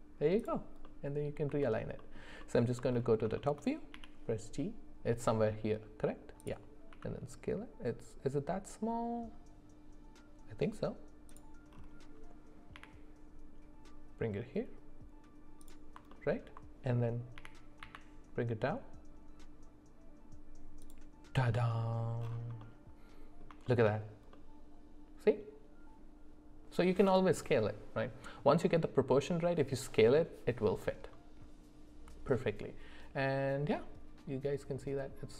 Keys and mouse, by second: 0.8-1.3 middle drag, 1.6 alt+middle click, 2.4 alt+middle click, 3.4 shift+middle click, 3.9 g, 6.9 s, 12.7 g, 16.1 alt+middle click, 17.4 g, 22.6 middle click, 23.7 shift+middle click, 24.3-25.5 middle drag.